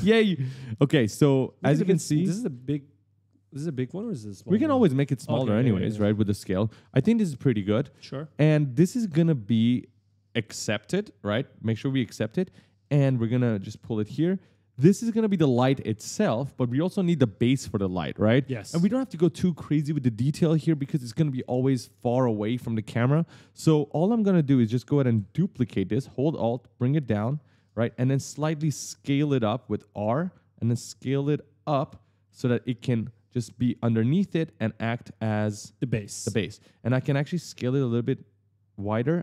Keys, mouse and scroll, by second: 1.8 right click, 2.9-4.2 typing, 6.3 right click, 10.7 click, 12.6 right click, 14.0 click, 24.4 click, 26.2 alt+click, 27.6 right click, 28.3 r, 29.8 click, 31.7 right click, 31.7-35.8 typing, 37.4 click.